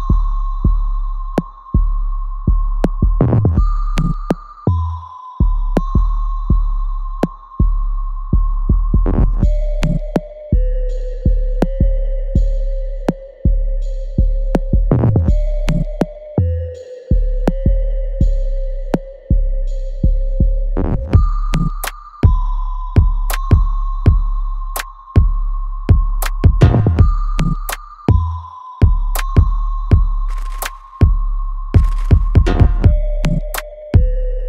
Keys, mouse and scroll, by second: 0.1-2.3 ctrl+drag, 2.3 right click, 3.1 click, 4.1 alt+right click, 4.8-7.3 alt+drag, 7.7-9.1 alt+right drag, 9.1-11.2 ctrl+drag, 11.2 alt+middle click, 11.7 alt+right click, 12.7 ctrl+click, 13.9-16.0 ctrl+drag, 16.4 alt+right click, 17.3-22.8 ctrl+drag, 22.7 right click, 24.1-26.5 ctrl+drag, 26.5 right click, 27.2 click, 27.5 alt+right click, 28.0 alt+click, 29.7 alt+click, 30.7 alt+right click, 31.3 alt+middle click, 32.1 right click, 32.9 click, 34.1 click.